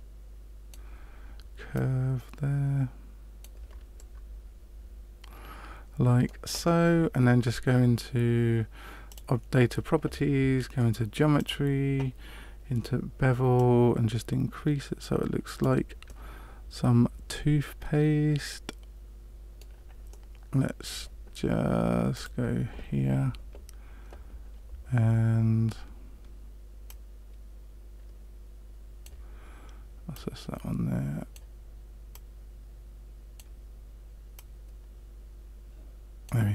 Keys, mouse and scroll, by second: 1.7 right click, 3.9 middle click, 9.0 click, 11.3 click, 13.5 click, 16.0 middle click, 20.0 middle click, 22.1 click, 26.8 right click, 30.1 right click, 32.1 right click, 34.3 right click.